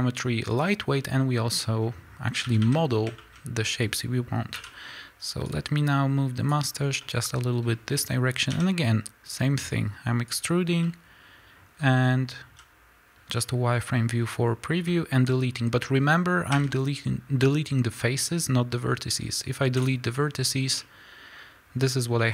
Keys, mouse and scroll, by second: 2.4 a, 2.8 scroll down 2, 3.2-4.5 scroll up 3, 4.5 l, 5.6-6.9 drag, 6.7 scroll up 1, 6.9-10.4 middle drag, 8.7 e, 10.4 click, 10.6 scroll down 1, 10.7-22.3 middle drag, 12.0 z, 14.8 z, 15.6-16.4 scroll up 2, 16.4 x, 22.0 scroll down 1.